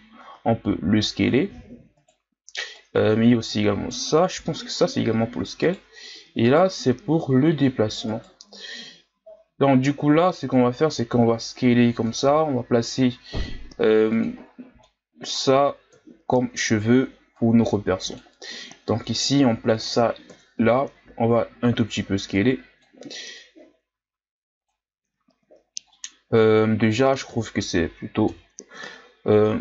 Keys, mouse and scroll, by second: 2.7-4.4 right drag, 4.4 s, 6.5 right click, 7.1 s, 10.2 right click, 10.7 s, 12.4-13.1 scroll up 4, 14.1 click, 14.5 scroll down 1, 14.8-15.9 middle drag, 15.9 KP_3, 17.3-18.4 drag, 18.4 s, 20.3 KP_1, 21.2-22.3 scroll up 1, 22.3-25.9 drag, 25.9-27.3 middle drag, 27.3 KP_1, 28.2 KP_3, 29.0 scroll down 1, 29.3-29.6 scroll up 2.